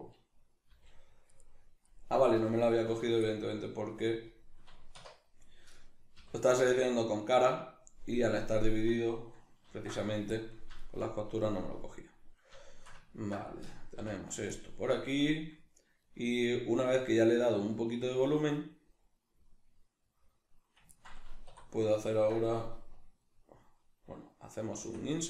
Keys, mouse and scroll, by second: 0.7 g, 1.9 right click, 2.3 l, 3.3-5.7 middle drag, 5.0 1, 5.7 right click, 6.2 l, 6.7-25.2 middle drag, 9.7 ctrl+e, 14.0 ., 21.5 3.